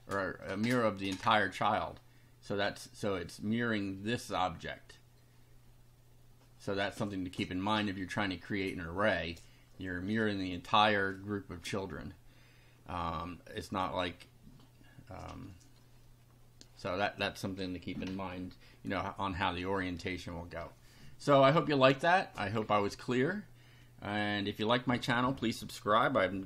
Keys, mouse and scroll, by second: 0.4-1.5 drag, 17.1 click.